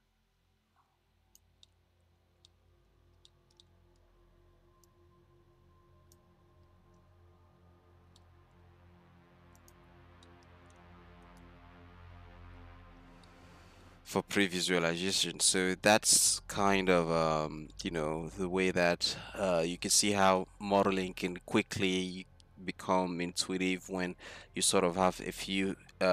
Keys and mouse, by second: 1.3-1.7 middle drag, 1.7 click, 1.7-2.6 middle drag, 5.0-6.6 drag, 6.6-7.9 middle drag, 8.2 shift+d, 13.3-14.2 middle drag, 14.4 middle click, 15.3 middle click.